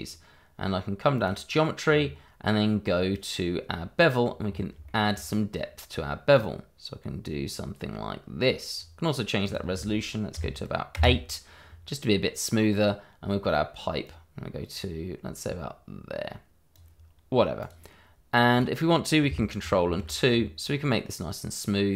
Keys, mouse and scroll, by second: 1.1 click, 1.8-2.2 scroll down 1, 4.4-4.7 scroll up 1, 4.8 shift+middle click, 6.3 click, 10.3 8, 10.9 Return, 12.2 middle click, 14.0 click, 17.3-17.6 scroll down 1, 17.6 click, 17.9 middle click, 18.5 click, 19.8 ctrl+2, 20.2-20.7 scroll up 1, 20.7 middle click.